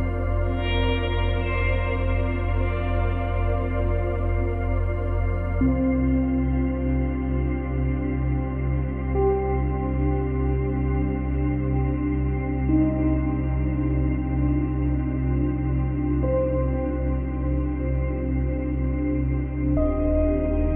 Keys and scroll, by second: 6.6 Delete, 9.2 F9, 12.4 Delete, 14.9 ctrl+z, 16.6 space.